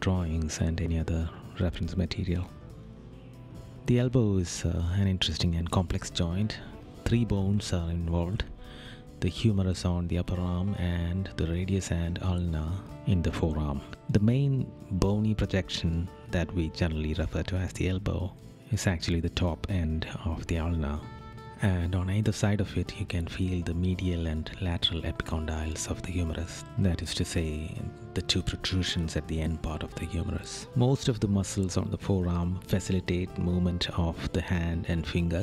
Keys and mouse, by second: 0.8 right click, 2.8 right click, 6.4 right click, 12.8 right click, 18.2 right click, 27.4 right click, 33.0 right click.